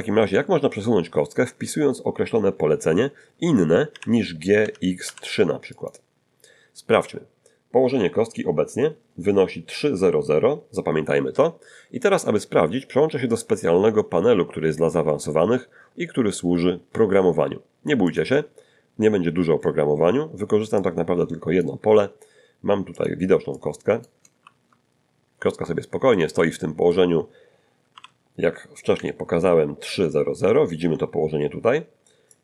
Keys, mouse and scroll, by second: 3.9 g, 4.6 x, 5.0 3, 5.7 click, 8.5 middle click, 8.5 scroll up 1, 13.3 click, 18.1 click, 20.8-21.8 drag, 22.9 click, 23.5 click, 24.4 shift+c, 24.9-25.5 shift+scroll up 2, 25.6 click, 27.9 n, 29.0-30.5 ctrl+drag, 30.5 ctrl+middle click, 32.3-32.4 drag.